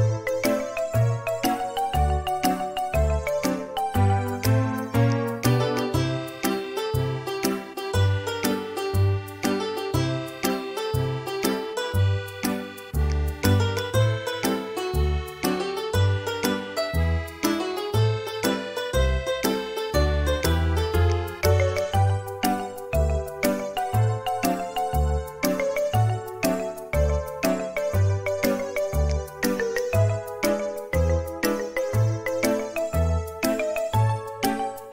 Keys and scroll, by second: 1.2-2.4 typing, 5.7-6.1 typing, 10.4-10.9 typing, 12.1 Return, 17.0 space, 18.0 r, 20.0 space, 22.4 typing, 25.3-26.7 typing, 28.7 space, 32.6 space, 34.7 typing.